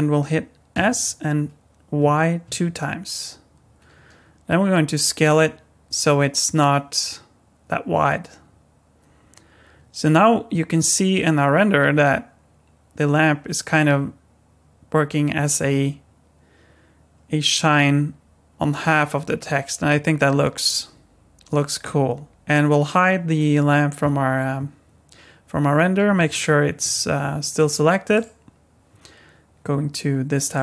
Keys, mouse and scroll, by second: 0.7 s, 26.3 middle click, 27.6 click, 28.1 click, 30.5 click.